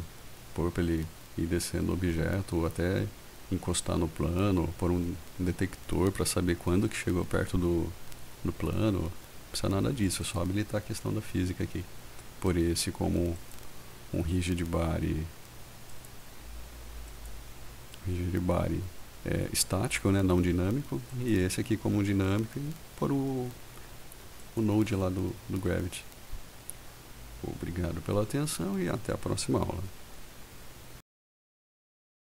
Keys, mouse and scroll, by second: 10.3 click, 13.5 click, 16.0 click, 17.2 click, 21.2 click.